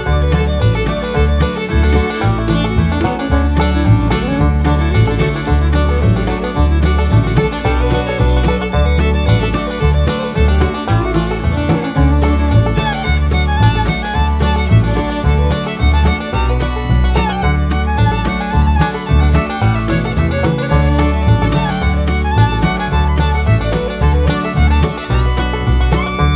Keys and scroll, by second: 1.1 1, 1.4 8, 8.6 9, 11.5-12.3 typing.